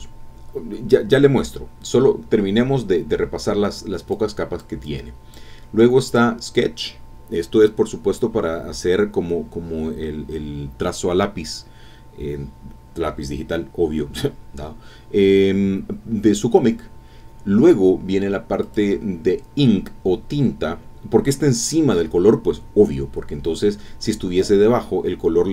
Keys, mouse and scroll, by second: 0.3 scroll up 2, 0.6 scroll down 2, 1.3 scroll up 2, 1.8 scroll down 2, 2.7 scroll up 2, 4.1 click, 4.8 click, 6.1 click, 18.6 click.